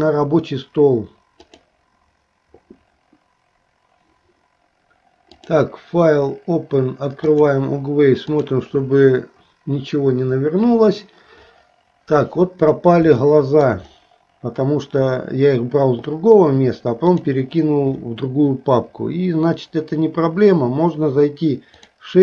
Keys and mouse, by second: 7.4-9.4 drag, 13.3 shift+middle click, 20.9-22.2 drag.